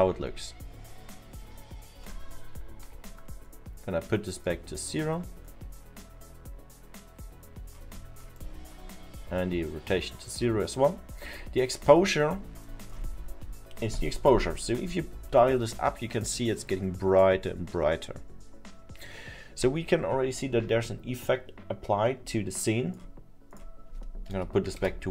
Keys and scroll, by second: 2.5 ctrl+z, 24.4 1.